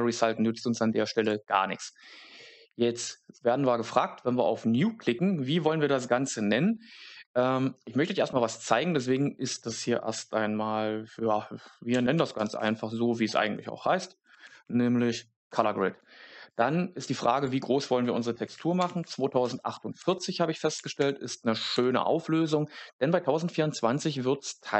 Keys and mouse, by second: 1.3-24.7 drag.